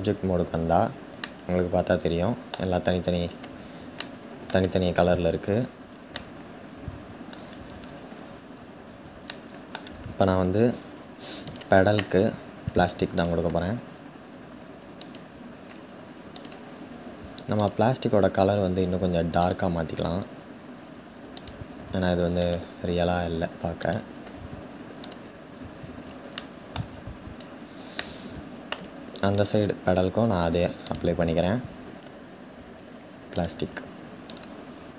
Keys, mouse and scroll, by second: 1.1-2.4 middle drag, 2.4 scroll down 1, 3.7-7.2 shift+middle drag, 7.2-8.8 scroll down 4, 8.9-10.2 shift+middle drag, 10.2-11.1 scroll up 4, 11.1 click, 14.8-16.0 drag, 16.4-17.2 scroll down 1, 25.1-26.0 scroll down 4, 26.0 shift+middle click, 26.5-28.1 scroll down 2, 28.1 middle click, 29.0 click, 33.1-34.0 drag, 34.3-34.9 scroll down 1.